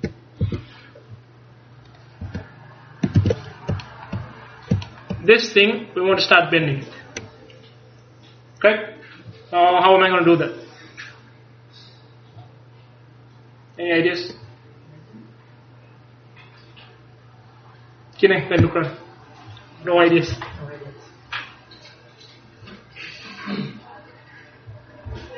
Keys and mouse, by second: 0.0 Tab, 0.5 a, 2.3 Tab, 3.2 ctrl+s.